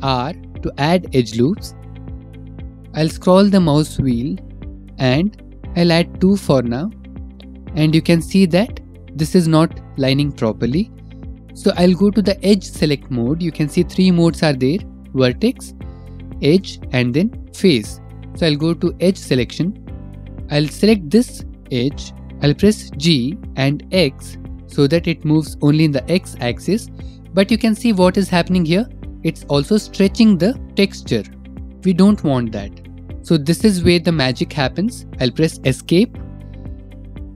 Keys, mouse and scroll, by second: 0.1 ctrl+r, 2.9-3.4 scroll, 5.1 scroll, 7.2 click, 15.0 click, 16.0 click, 17.5 click, 19.1 click, 19.6 click, 20.9 click, 22.2 Escape, 22.2 g, 22.2 x, 23.0 g, 24.0 x, 34.3 Escape.